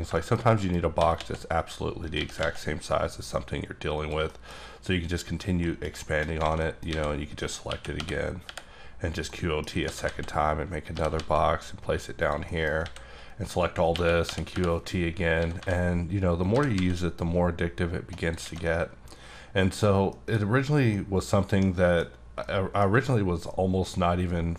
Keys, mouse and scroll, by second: 1.0 s, 1.1 x, 2.0 click, 2.1 g, 2.4 x, 3.9 click, 4.2 shift+middle click, 4.7 scroll up 1, 5.6 middle click, 6.4 alt+a, 6.6 middle click, 7.7-8.4 typing, 9.3 middle click, 9.8 s, 10.0 z, 10.8 click, 10.9 g, 11.1 z, 12.2 click, 12.4 middle click, 12.8 a, 13.9-16.8 typing, 15.3 scroll down 1, 18.2 click, 18.4 alt+click, 18.4 alt+a, 18.6 middle click, 19.8-20.1 scroll down 2, 20.1 middle click, 20.4-20.9 scroll up 2, 20.9 middle click, 22.4 middle click, 23.8 middle click.